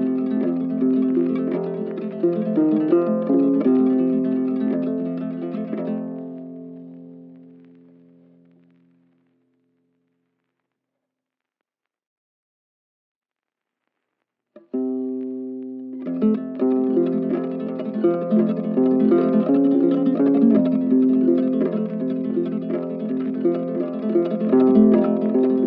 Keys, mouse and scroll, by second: 0.3 ctrl+shift+space, 2.8 right click, 8.1 z, 12.3 right click, 13.8 ctrl+click, 20.8 right click, 22.5 ctrl+click, 23.3 ctrl+click, 25.2 ctrl+click.